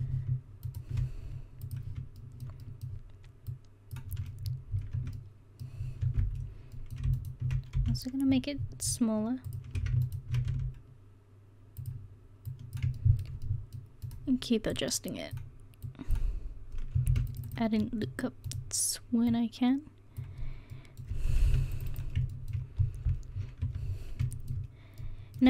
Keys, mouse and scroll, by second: 5.0 Tab, 6.0 Tab, 7.8 s, 10.5 s, 13.0 middle click, 17.1 ctrl+r, 19.3 right click, 20.8 middle click, 21.5 ctrl+r, 22.9 click, 23.4 click, 23.6 Tab.